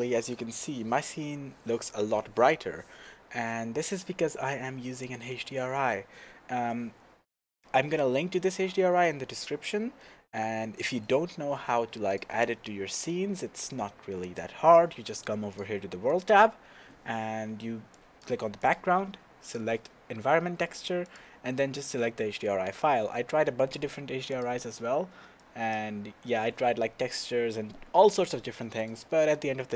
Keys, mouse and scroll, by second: 4.9-12.2 middle drag, 5.3-6.1 scroll down 2, 6.1 scroll up 2, 10.6 scroll up 1, 12.2 click, 14.5-15.0 scroll down 1, 15.6 click, 16.1 click.